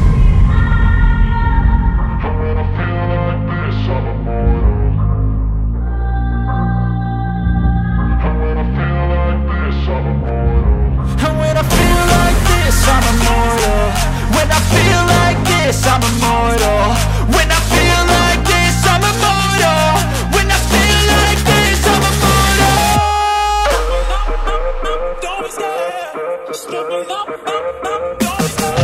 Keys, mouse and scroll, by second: 1.6 g, 2.9 x, 22.8 click, 28.7 r.